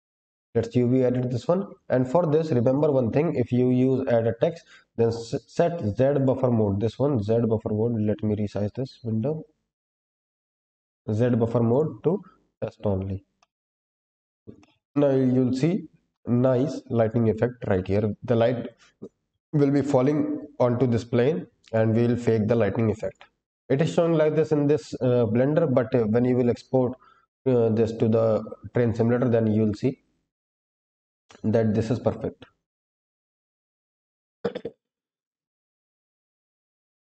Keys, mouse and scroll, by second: 1.2-4.3 scroll down 7, 4.3-5.9 drag, 6.1 click, 9.8 click, 11.6 click, 13.3 middle drag, 13.8-14.4 scroll up 1, 14.4 scroll up 1, 14.5 shift+middle drag, 15.9-16.3 scroll down 2, 16.2 click, 16.7 s, 17.8 middle drag, 21.6 click, 23.0 click, 23.5-25.9 scroll down 1, 25.9-26.4 scroll down 1, 26.4 scroll down 1, 26.9-27.7 scroll down 1, 27.7 click, 28.3-29.0 scroll up 5, 30.7-31.9 drag, 32.9-33.7 scroll down 1, 33.9-34.5 scroll up 1, 34.5 scroll down 1, 34.6-36.0 scroll down 1, 36.9-37.1 scroll up 2.